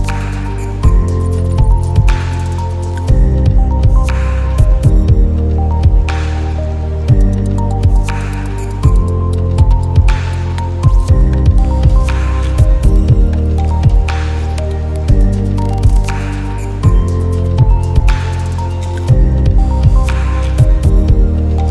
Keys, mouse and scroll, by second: 0.7 click, 2.5 shift+click, 10.2-12.2 drag, 17.4 click, 18.0-18.5 alt+scroll down 2, 19.3-20.2 drag.